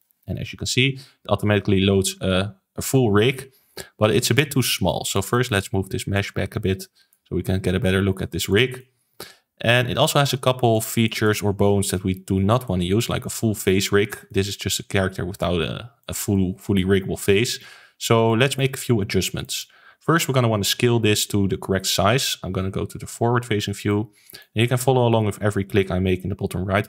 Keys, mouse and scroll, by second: 2.3 ctrl+s, 3.6-5.0 middle drag, 5.0 click, 5.2-6.1 middle drag, 6.1 click, 7.4-8.4 middle drag, 8.4 click, 8.7-11.6 middle drag, 11.6-12.6 scroll up 2, 12.6-13.8 middle drag, 13.8-14.2 scroll down 1, 14.2-22.5 middle drag, 23.1 KP_1, 23.8-26.8 shift+middle drag.